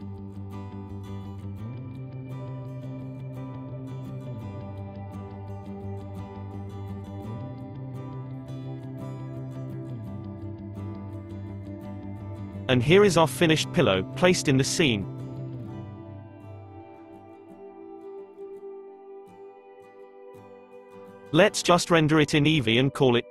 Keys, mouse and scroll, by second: 0.0-4.8 middle drag, 4.8-6.1 drag, 6.1 middle click, 6.2-6.7 scroll up 7, 9.5 click, 10.5-11.3 middle drag, 11.3-12.3 scroll up 11, 12.3-13.2 middle drag, 13.2-13.7 scroll up 3, 16.0 KP_0, 16.9-18.1 scroll down 7, 18.2-19.6 shift+middle drag, 19.6 click, 21.8 click, 22.9-23.3 scroll down 2.